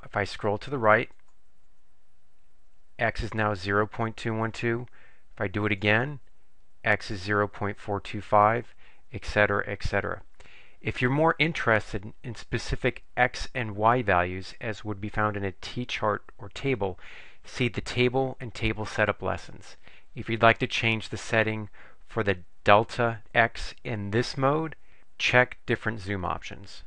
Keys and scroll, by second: 1.3 Right, 5.8 Right.